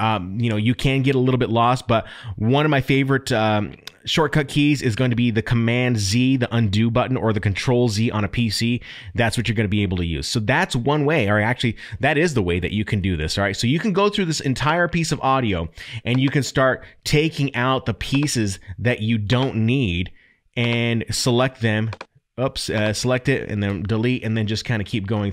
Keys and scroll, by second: 23.7 Delete.